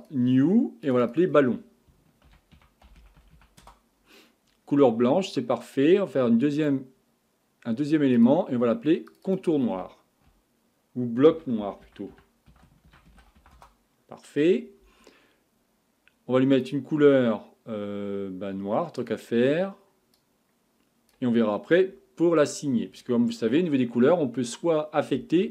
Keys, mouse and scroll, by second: 0.0-0.9 drag, 1.0 click, 6.6-9.2 drag, 9.2 click, 16.6 click, 19.0 click.